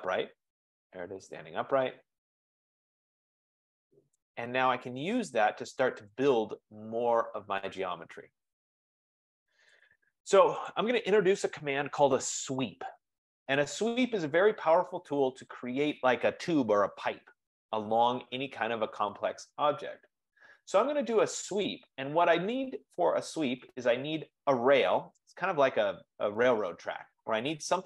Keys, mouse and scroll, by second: 0.6 right click, 4.3 right click, 4.8-5.6 scroll, 6.0 scroll down 2, 6.2 click, 8.8 scroll, 10.0 click, 10.8 click, 16.2 F15, 21.8-26.9 drag.